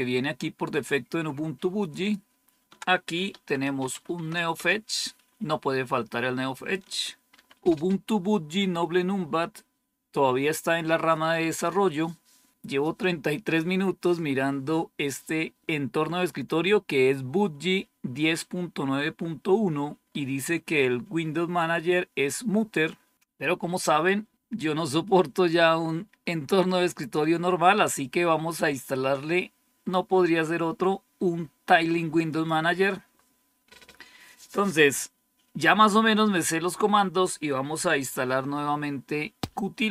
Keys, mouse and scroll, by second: 1.7 click, 2.6 ctrl++, 2.9-4.3 typing, 4.5 Return, 7.2 ctrl++, 7.3-8.0 typing, 32.1 click.